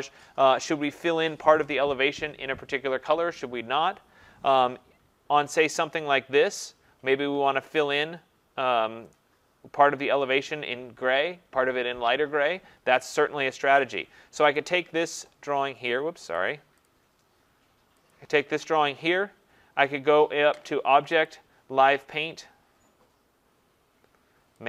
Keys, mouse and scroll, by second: 0.4 scroll, 0.5-4.1 scroll down 5, 4.1-4.5 scroll down 3, 4.8-6.1 scroll down 3, 9.5-10.0 scroll up 3, 10.0-13.4 scroll, 13.4-14.6 scroll, 14.6 click, 14.6 scroll, 16.4 click, 16.9 click, 18.1 click, 21.3 click.